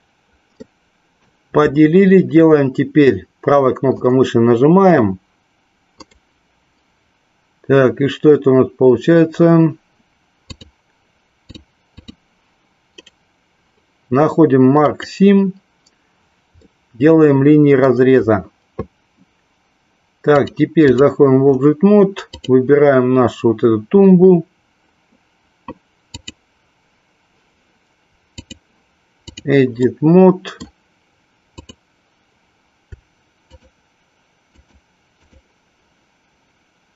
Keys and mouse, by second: 0.7 middle click, 3.9-4.9 right drag, 6.0-9.5 right drag, 10.5 click, 12.0 click, 12.9-15.2 right drag, 16.5-17.9 middle drag, 20.3 click, 22.4 click, 26.2-27.4 drag, 28.4-29.4 drag, 29.9 middle click, 33.5 shift+click, 34.5 shift+click, 35.3 shift+click.